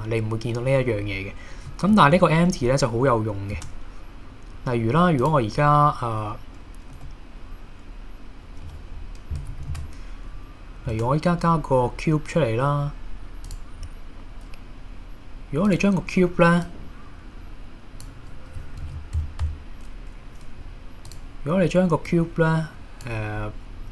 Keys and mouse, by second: 1.7 middle click, 2.1 KP_1, 3.6 shift+a, 7.0 z, 9.8 super+z, 10.9 shift+a, 15.7 click, 16.7-18.0 drag, 18.8 super+z, 19.4 Tab, 21.1 click, 22.1 click.